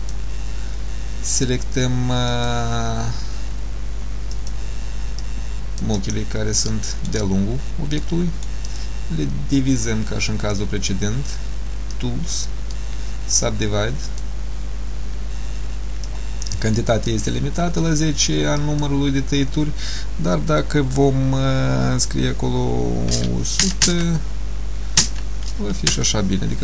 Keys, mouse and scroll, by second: 6.8 shift+middle click, 7.4-7.8 scroll up 3, 8.1 middle click, 12.0 click, 14.1 click, 16.1 click, 18.7 click.